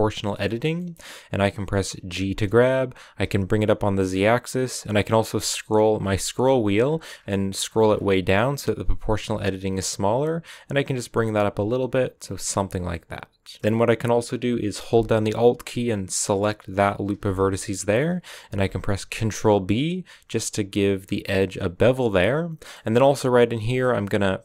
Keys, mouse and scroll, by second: 0.1-2.0 shift+middle drag, 2.0 g, 5.6 middle click, 12.6 scroll down 1, 12.8 middle click, 13.6-14.8 scroll up 2, 16.8 alt+right click, 17.2-18.4 middle drag, 18.4 ctrl+b, 22.1 middle click, 22.8 scroll up 1.